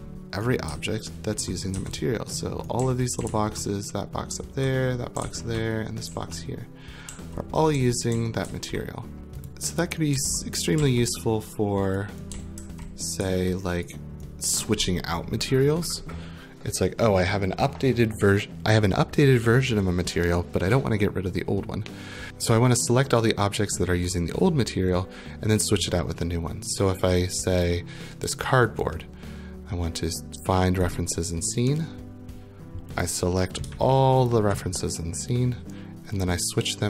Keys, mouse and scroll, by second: 0.7-10.8 typing, 0.7 click, 1.2 click, 2.3 right click, 9.2 right click, 9.5 click, 11.9 right click, 12.1-13.2 typing, 13.8 right click, 14.3 right click, 27.6 click, 28.5 right click, 30.9 click, 33.0 click, 34.3 shift+click.